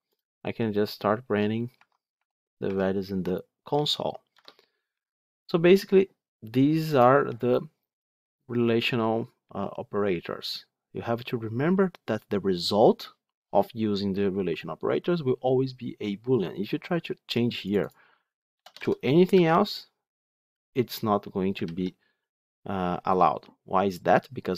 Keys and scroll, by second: 0.5 F8, 4.2 F9, 19.2 Escape, 21.5 ctrl+z.